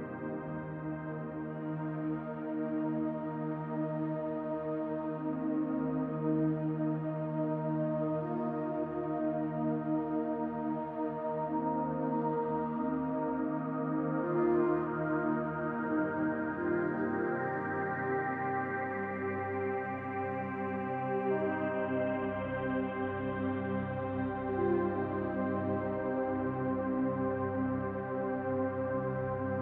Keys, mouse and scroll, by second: 1.1 middle click, 2.3 click, 2.6 middle click, 3.0-3.7 scroll up 1, 3.7 click, 5.8 middle click, 6.4 middle click, 7.1 click, 8.0 click, 9.7 shift+middle click, 10.9 middle click, 11.5 shift+middle click, 13.1 Tab, 14.1 click, 17.0 click, 20.2 click, 20.2 e, 21.8 click, 22.3 click, 23.6 click.